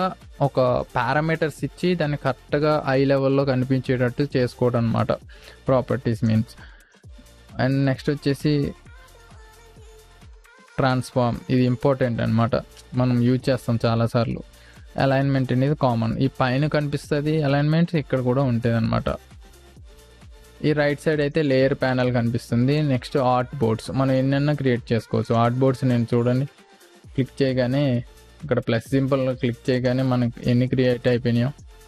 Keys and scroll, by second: 27.6 ctrl+space.